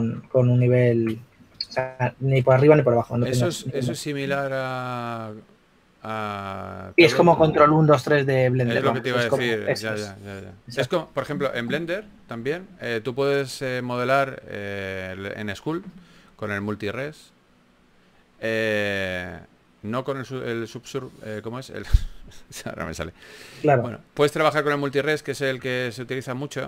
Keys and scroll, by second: 0.5 super+z, 0.9 super+z, 1.1 super+z, 2.6 shift+f, 3.4 shift+f, 5.3 shift+f, 5.5 shift+f, 17.1 s.